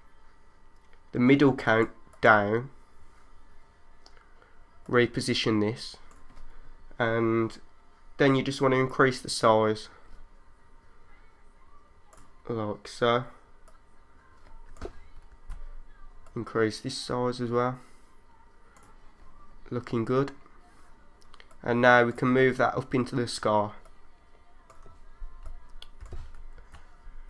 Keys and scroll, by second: 15.3 super+z, 25.4 3, 26.6 super+z.